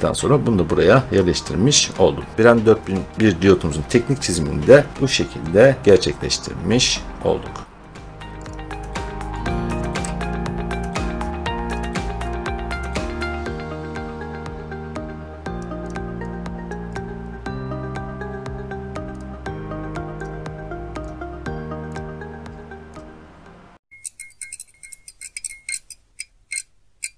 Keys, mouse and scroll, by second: 1.0 click, 2.3-3.1 scroll, 4.4 scroll, 4.9 scroll down 1, 5.1-5.5 scroll down 1, 8.4 click, 8.4 click, 9.6 click, 9.9 3, 11.2 click, 11.7 click, 12.8 middle click, 15.5 click, 15.8 click, 16.7 click, 16.9 click, 18.1 middle click, 18.3 middle click, 19.2 click, 20.1 scroll, 20.2 click, 21.0 click, 21.9 click.